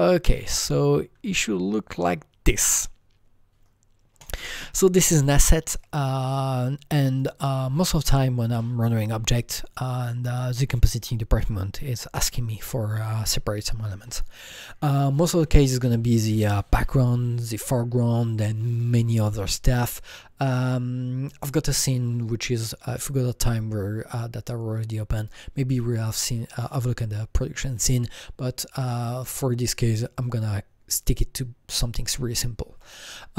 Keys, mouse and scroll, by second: 1.1-3.4 drag, 4.2 click, 5.8 click, 6.5-7.8 drag, 7.8-9.4 drag, 9.4-12.9 drag.